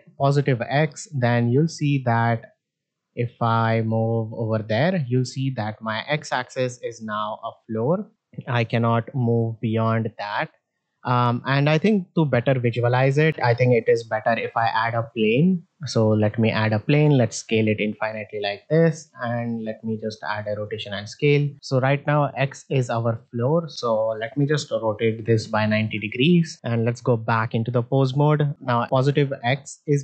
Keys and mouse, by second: 0.1 click, 1.0-1.8 middle drag, 2.9-5.8 drag, 6.7 shift+middle drag, 8.0-10.6 drag, 11.4 middle drag, 13.5 ctrl+Tab, 14.3 middle drag, 14.8 shift+a, 16.8 s, 18.5 ctrl+a, 20.4 middle drag, 21.2 middle drag, 22.3-22.6 middle drag, 23.1-23.5 middle drag, 24.3 r, 26.4 middle click, 26.5 ctrl+Tab, 27.8 middle drag, 28.5-28.8 drag, 29.5-30.0 middle drag.